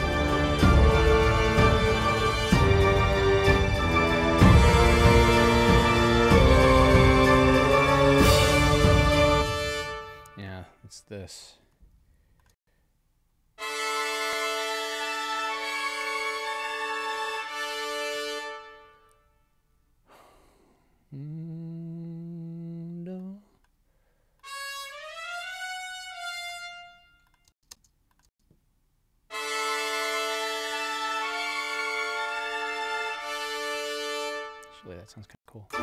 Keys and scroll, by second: 9.2 space, 12.5 space, 17.8 space, 27.5 space, 33.7 space, 35.3 space.